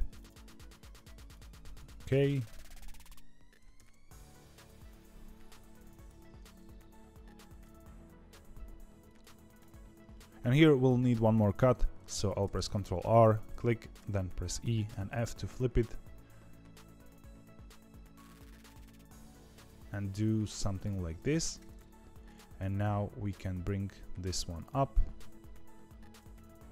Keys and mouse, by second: 1.3 click, 1.9 g, 5.0-6.3 drag, 6.3 g, 10.3 ctrl+z, 12.4 ctrl+r, 24.3 g.